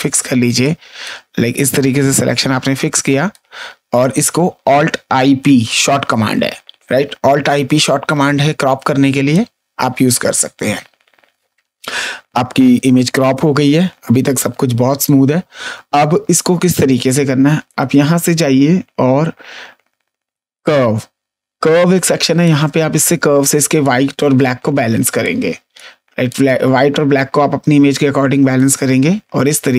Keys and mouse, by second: 0.1 space, 0.6 click, 1.6 click, 4.2 Up, 7.9 ctrl+d, 9.0 space, 9.2 click, 17.6 click, 20.5 click, 22.4 click, 25.1 click.